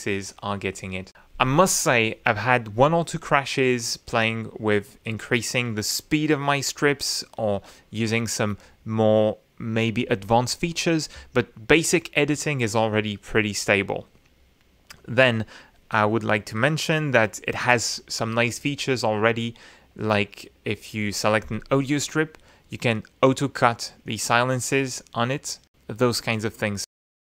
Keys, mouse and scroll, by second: 0.9-4.3 drag, 6.0 right click, 6.2 click, 6.6 right click, 11.6 click, 21.1-25.1 right drag, 26.5 click.